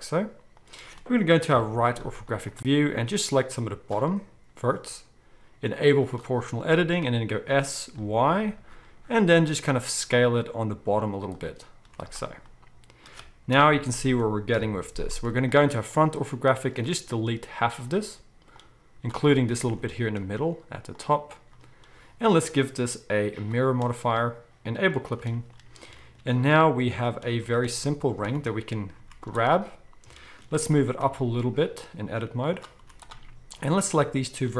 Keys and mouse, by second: 1.5 KP_3, 2.1 z, 3.2-6.1 drag, 6.1-15.9 middle drag, 7.3 s, 11.8 z, 13.5 KP_1, 14.5 KP_1, 14.5 KP_4, 15.1 z, 15.9-24.9 drag, 17.1 x, 20.0 x, 24.9-26.5 shift+middle drag, 26.5-32.6 drag, 27.3 z, 28.3 a, 29.0 z, 30.7 g, 32.6-33.6 middle drag, 32.8 z, 33.6-34.5 drag.